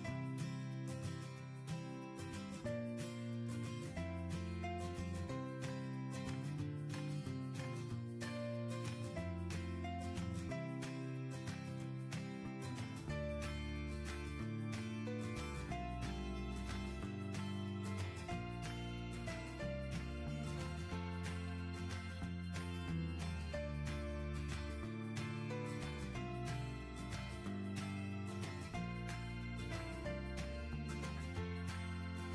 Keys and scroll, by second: 11.8 ctrl+Insert, 13.7 shift+Insert, 16.6 shift+Insert, 18.7 Home, 21.2 Left.